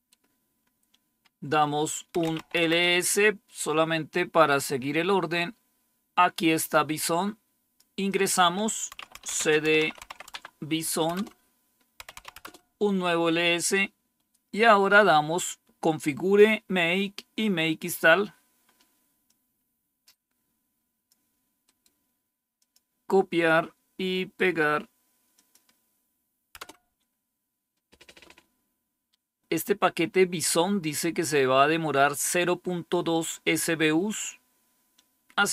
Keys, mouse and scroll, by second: 1.9-2.7 typing, 4.5-6.1 scroll up 1, 4.5 typing, 6.4-8.8 drag, 8.8-12.6 typing, 16.5 scroll down 1, 19.1-21.0 drag, 21.5 right click, 22.5 click, 23.0 click, 24.0 right click, 25.2-26.3 drag, 26.5 Return, 29.9-31.2 scroll up 1.